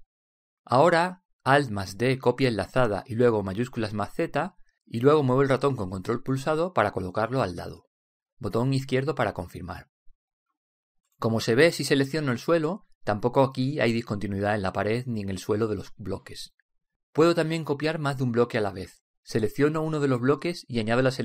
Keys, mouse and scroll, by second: 2.5 alt+d, 4.5 alt+d, 9.7 click, 13.6 right click, 14.3-15.5 middle drag, 20.4 right click.